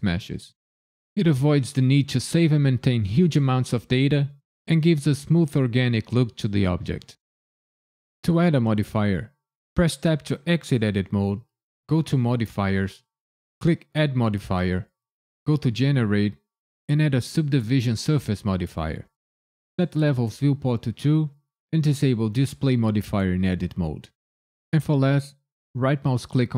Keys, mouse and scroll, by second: 10.0 Tab, 12.1 click, 13.8 click, 19.8 click, 22.3 click, 25.8 right click.